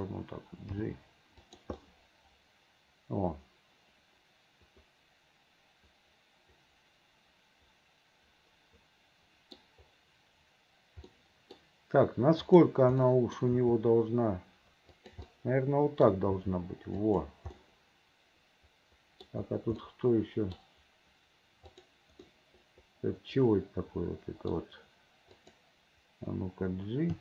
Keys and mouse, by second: 0.9 g, 1.9-9.7 drag, 2.3-9.7 right drag, 11.3 click, 11.3 right click, 12.6 click, 13.1 click, 13.6 g, 15.6 click, 16.5 g, 17.7-18.8 drag, 18.8 middle click, 19.9 click, 21.9 click, 22.3-24.6 middle drag, 25.4 click.